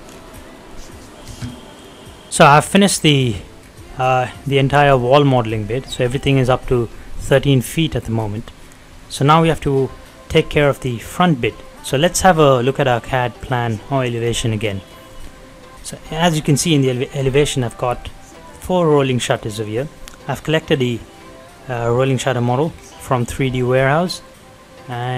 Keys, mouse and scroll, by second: 0.6 middle click, 1.3 space, 1.8 click, 2.3-2.9 scroll down 2, 2.4 middle click, 3.2 middle click, 3.5 scroll down 1, 3.7-7.0 middle drag, 7.0-7.4 scroll up 1, 7.7 middle click, 8.1 scroll down 1, 8.4 middle click, 8.4 middle click, 8.9 shift+middle click, 12.8 middle click, 13.3 click, 14.8 scroll down 1, 15.0 middle click, 15.3 scroll up 1, 15.6 middle click, 17.3-17.9 scroll up 1, 17.9-19.2 middle drag, 19.2-19.6 scroll down 1, 20.7 click, 21.4 middle click, 21.8 scroll up 1, 22.4 middle click, 22.7-23.3 scroll down 1, 23.3 middle click, 23.8 scroll up 1, 24.2-25.1 middle drag.